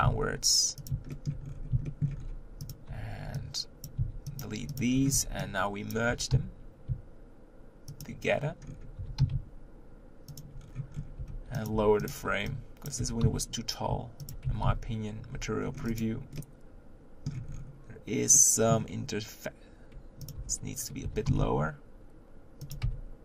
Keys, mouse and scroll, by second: 1.1-1.4 shift+middle drag, 1.4-1.9 scroll up 3, 1.9 shift+middle drag, 2.2 scroll up 2, 2.7 click, 3.9 b, 4.4 x, 4.8 click, 4.9-5.7 scroll down 3, 5.7 scroll down 1, 5.9 b, 6.1 g, 8.7-9.0 scroll up 4, 9.0 g, 10.6-11.2 scroll down 7, 11.2 Tab, 11.6 click, 11.7 Tab, 12.1 click, 12.9 b, 13.0 g, 14.5 Tab, 15.4 z, 15.6 scroll down 3, 15.9 click, 16.4-17.5 middle drag, 17.5-18.3 scroll up 6, 18.3-20.3 middle drag, 20.3 click, 20.4 Tab, 21.0 g, 22.8 Tab.